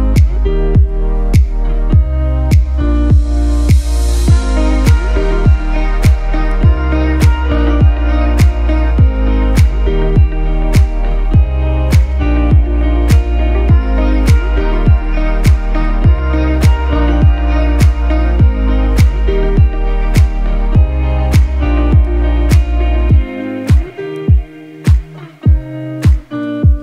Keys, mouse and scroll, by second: 0.4 click, 1.5 ctrl+z, 2.2-14.1 drag, 14.1 click, 14.7-16.9 typing, 14.9 click, 15.3 click, 15.7 click, 16.8 click, 17.1 click, 18.1 right click, 19.0-22.8 drag, 22.9-26.1 typing, 23.0 click, 23.3 click, 23.7 click, 23.7 click, 23.9 click, 24.3 click, 25.0 click, 25.5 click, 26.0 click, 26.3-26.8 drag.